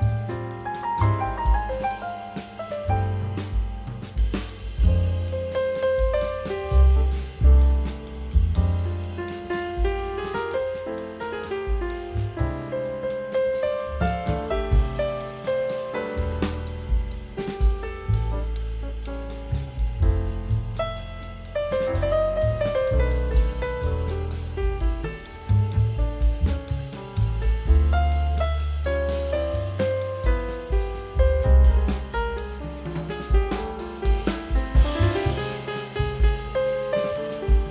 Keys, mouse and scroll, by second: 2.2 double click, 16.0 shift+click, 16.9 shift+click, 17.1 c, 18.0 scroll down 1, 18.6 scroll up 1, 19.7 scroll down 1, 21.1 shift+click, 21.4 typing, 21.9 scroll up 1, 22.6 c, 23.2 scroll down 1, 24.1 c, 24.7 double click.